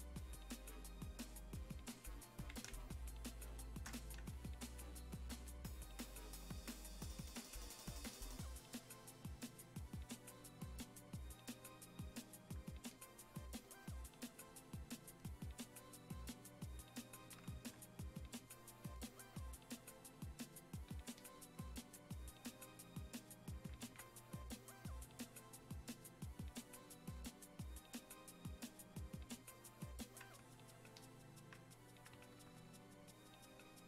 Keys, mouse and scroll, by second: 2.7 space, 3.0 click, 3.2 space, 5.8-33.8 drag.